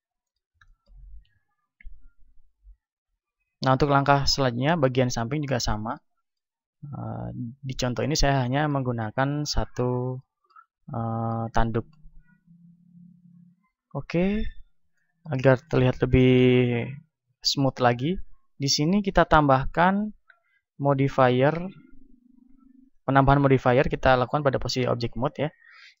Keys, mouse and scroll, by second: 6.7 Tab, 7.1 Tab, 9.8 Tab, 11.2 middle click, 11.9 middle click, 13.1-14.9 drag, 14.9-20.8 middle drag, 20.8 click, 21.9-26.0 drag.